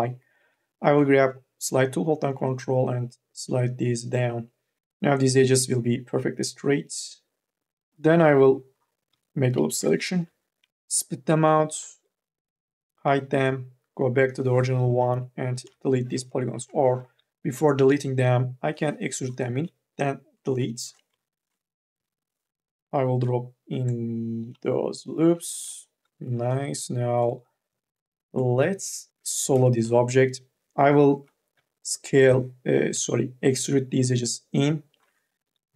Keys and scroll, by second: 0.2 m, 0.6 o, 4.8 ctrl+z, 7.7 3, 8.8-11.6 typing, 15.4 Delete, 16.8 ctrl+z, 17.7 d, 20.3 Delete, 21.7 k, 22.1 l, 25.1 q, 26.0 q, 29.2 2, 29.7 e, 31.4 d, 33.1 ctrl+z, 35.4 k.